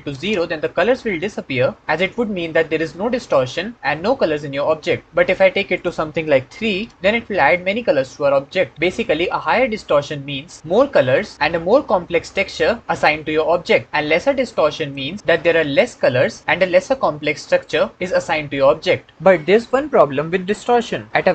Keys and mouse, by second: 5.5-6.7 drag, 14.4 click.